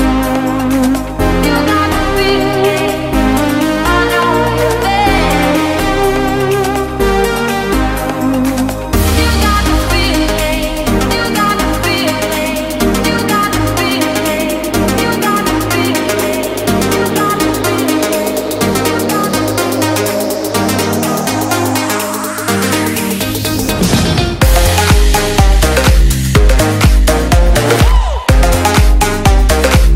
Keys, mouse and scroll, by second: 0.0-0.3 typing, 0.4 Return, 1.6 click, 4.9-6.0 typing, 6.9 click, 7.7-9.0 typing, 9.8 click, 12.7-14.1 typing, 16.2-17.0 scroll down 1, 17.0 click, 20.1-21.0 typing, 21.7 click, 25.5 Tab, 25.5 F10, 26.2 click.